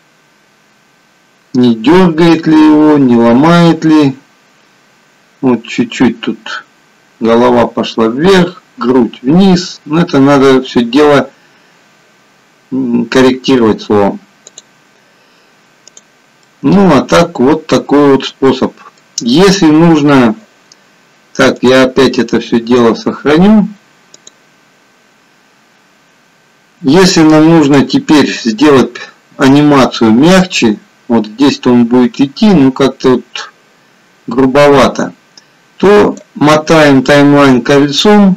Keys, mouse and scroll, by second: 14.8 click, 15.9 click, 16.4 middle click, 18.8 middle click, 24.4 click, 27.7 click, 29.6 click, 36.7-38.3 scroll up 13.